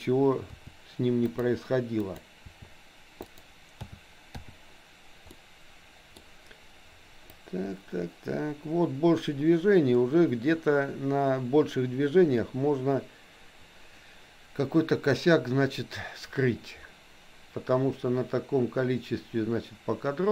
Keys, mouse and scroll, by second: 0.5 r, 2.0 click, 2.5 r, 3.9 a, 4.4 i, 5.3 middle click, 7.4-20.3 drag.